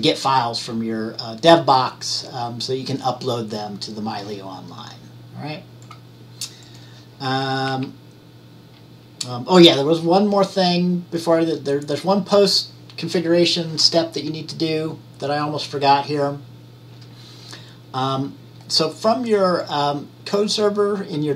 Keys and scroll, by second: 7.8 Right.